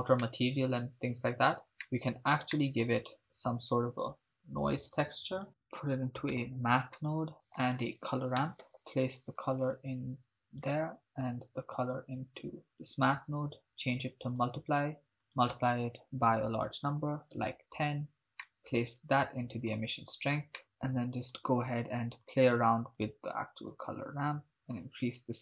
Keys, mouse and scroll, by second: 0.2-1.5 middle drag, 1.8 ctrl+middle click, 2.5 middle click, 3.2 shift+a, 5.5 shift+a, 7.3 click, 7.3 middle click, 7.6 shift+a, 8.7 click, 9.4-10.7 drag, 11.8-12.6 drag, 12.7-14.5 drag, 15.2-17.5 drag, 18.4 middle click, 19.0-20.0 drag, 21.3-22.3 drag, 23.0-24.4 drag, 24.4 middle click.